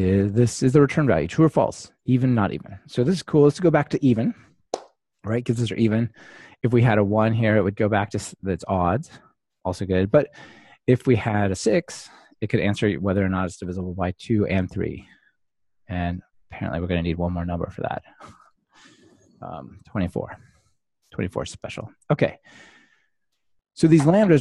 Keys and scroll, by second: 4.3 ctrl+r, 15.0 ctrl+r, 20.3 ctrl+r.